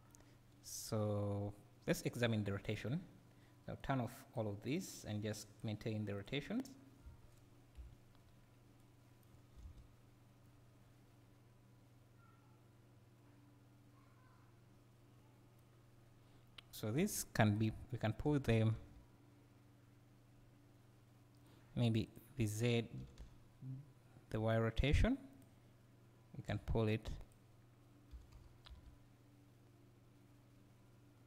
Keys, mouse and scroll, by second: 2.6 click, 3.8-6.2 drag, 10.4-21.5 right drag, 18.3 g, 22.1 click, 23.1 g, 25.4 click, 28.2 g.